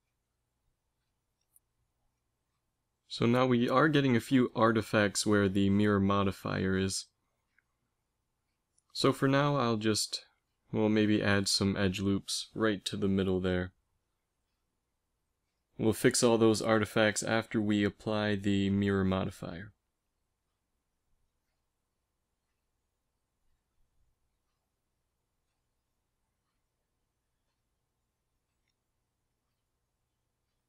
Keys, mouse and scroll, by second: 4.8 a, 6.3 Tab, 10.2 Tab, 10.9 ctrl+r, 12.8 middle click, 14.2 ctrl+z, 15.0 middle click, 17.7 ctrl+r, 23.5 g, 25.7 z, 27.1 g, 30.0 z.